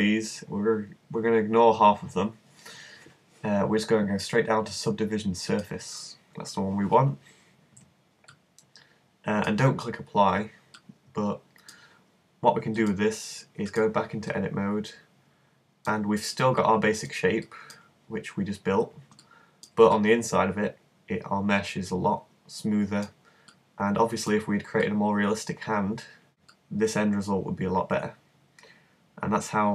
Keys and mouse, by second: 8.3 click, 14.5-21.7 middle drag, 23.5-26.3 middle drag, 26.6-28.6 middle drag.